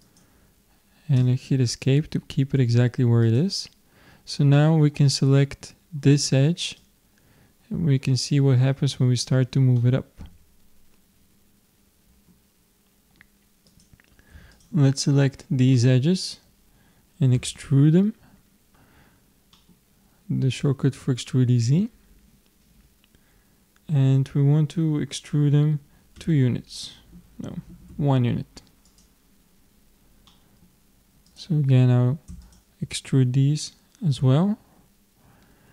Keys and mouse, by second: 3.3-5.0 drag, 5.0-6.8 middle drag, 6.8-8.6 drag, 9.8-11.5 middle drag, 13.7-16.4 drag, 15.8-17.6 middle drag, 17.4 e, 27.9 click, 30.3-31.3 middle drag, 31.3-34.4 drag, 34.2 e.